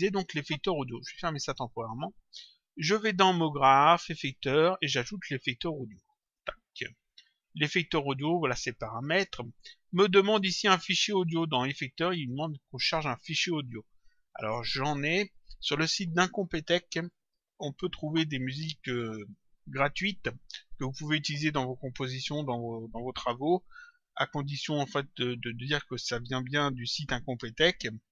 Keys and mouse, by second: 1.4 click, 3.3 click, 6.1 click, 11.5 click, 14.3 click, 17.1 click, 18.9 click, 22.2 click.